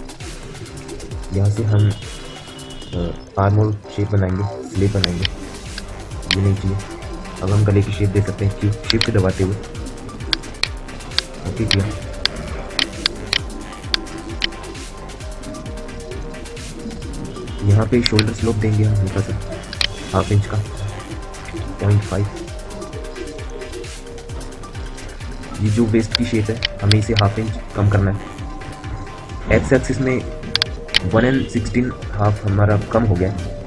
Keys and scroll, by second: 5.8 Delete, 7.9 q, 22.6 Return.